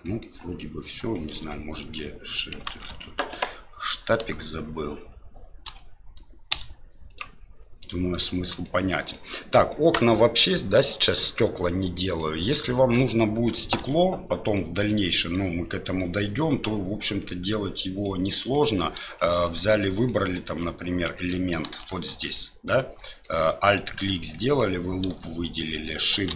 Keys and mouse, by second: 0.0 middle click, 1.1 shift+middle click, 1.5 middle click, 2.7 alt+a, 4.2 m, 5.6 l, 6.5 middle click, 6.5 click, 7.9 middle click, 8.6 middle click, 9.7-12.2 middle drag, 13.8 2, 14.5 middle click, 16.0-17.3 middle drag, 18.0 middle click, 18.5 middle click, 19.1 shift+middle click, 19.6 middle click, 20.6 middle click, 21.8 alt+right click, 22.3 middle click, 23.2-24.6 middle drag.